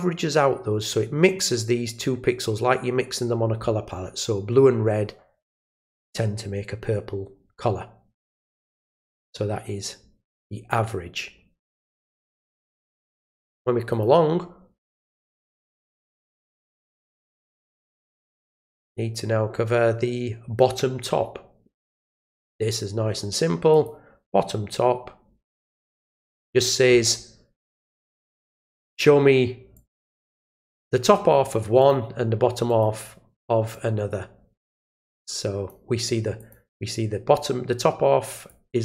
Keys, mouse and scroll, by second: 12.1 click, 13.9 click, 15.9 click, 17.2 click, 22.0 click, 22.5 click, 23.7 click, 26.0 click, 28.1 click, 29.7-30.4 drag, 31.8 click, 32.7 click, 33.7-35.7 drag, 36.4 click, 38.3 click.